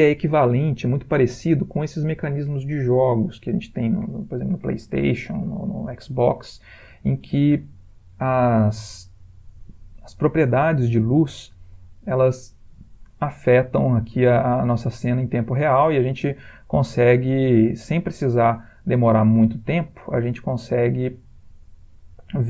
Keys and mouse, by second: 3.8 click, 7.1 click, 9.6 click, 11.6 click, 14.4 click.